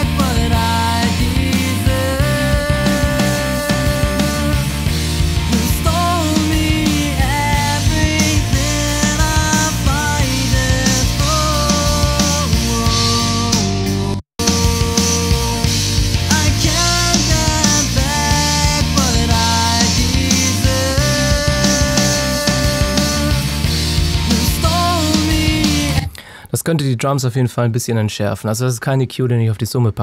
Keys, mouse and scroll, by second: 4.4 click, 14.0 space, 19.7 click, 25.9 space.